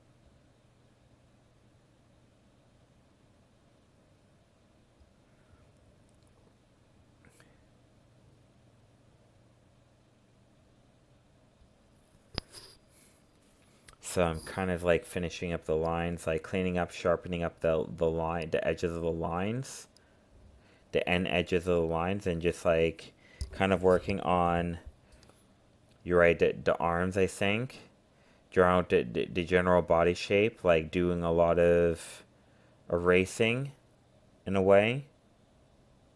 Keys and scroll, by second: 29.8 ctrl+alt+z.